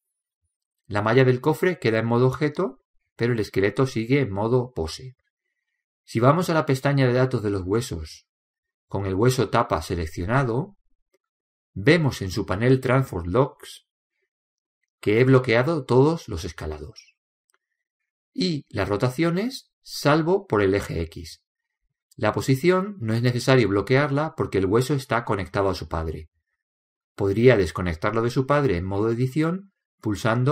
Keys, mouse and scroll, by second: 0.0-1.9 drag, 3.9-7.4 right drag, 9.8-11.6 drag, 10.6-12.3 right drag, 12.6-14.3 drag, 23.3-25.1 drag.